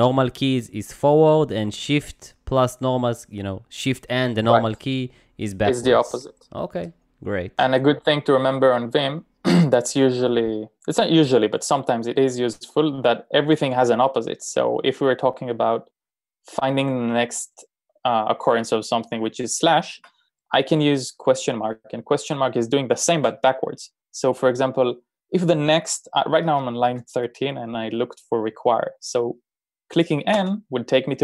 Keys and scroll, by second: 12.5 n, 19.3 /, 19.9 BackSpace, 30.4 n.